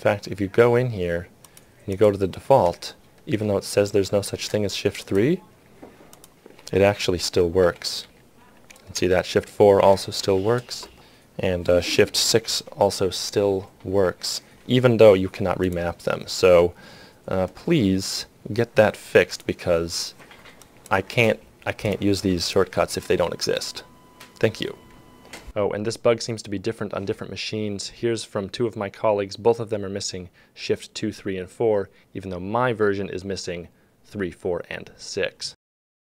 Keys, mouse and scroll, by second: 5.7 ctrl+click, 7.1 shift+3, 7.6 shift+3, 8.0 shift+3, 9.1 shift+4, 10.4 shift+3, 12.1 shift+6, 13.9 shift+5.